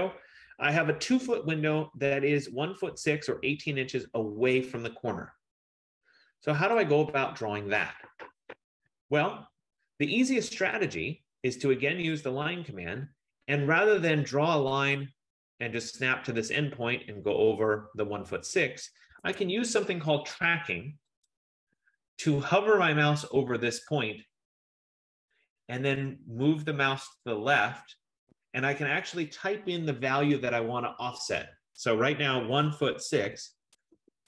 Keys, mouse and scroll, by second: 7.1 click, 8.4 click, 11.7 click, 16.7 click, 19.4 Escape, 21.4 click, 32.4-34.2 typing.